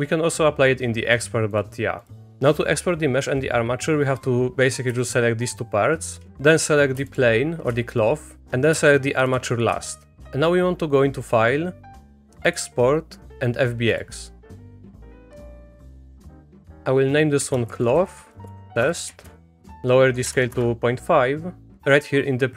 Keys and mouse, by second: 1.2 click, 1.5 click, 2.0 click, 2.3 click, 4.2 click, 5.0 shift+click, 7.1 shift+click, 9.3 shift+click, 11.2-14.3 drag.